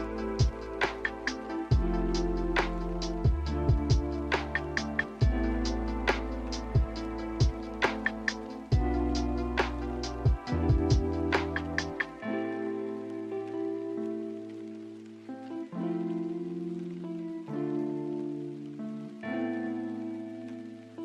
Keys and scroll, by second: 0.0 m, 4.2 s, 7.6 b, 19.7 Delete, 20.6 n.